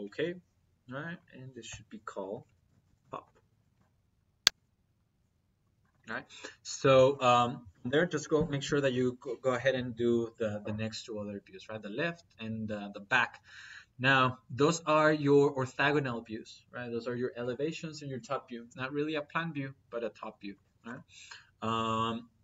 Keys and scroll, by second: 2.5 t, 2.8 o, 3.0 p.